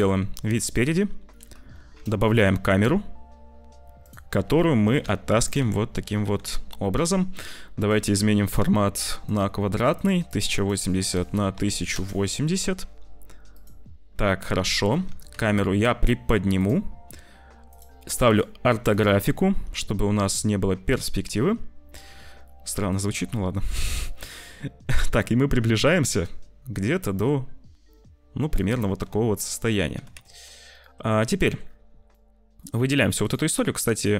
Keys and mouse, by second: 0.1 `, 1.7 shift+a, 4.3 click, 4.8 g, 5.5 `, 6.2 g, 9.2 click, 9.9 click, 10.5-11.9 drag, 15.0 g, 18.4 click, 21.2 z, 22.9-28.4 drag, 28.9 f, 29.3 click, 29.9 g, 31.3 click, 32.1 click, 33.1 click, 33.4 click, 33.7 q.